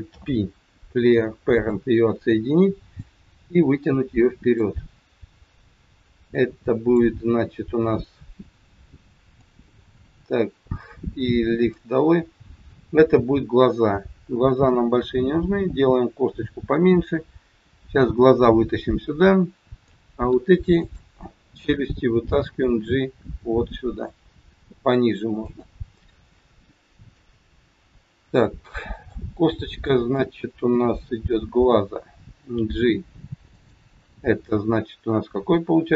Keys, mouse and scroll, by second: 0.2 alt+p, 2.9 click, 5.4-6.0 scroll down 2, 6.2 click, 9.3 click, 11.5 click, 12.3-13.2 scroll up 2, 14.7 s, 19.8 click, 20.8 shift+click, 22.5 g, 26.5 shift+middle click, 28.5 scroll up 1, 28.7 middle click, 29.7 click, 30.8 KP_7, 32.4 g.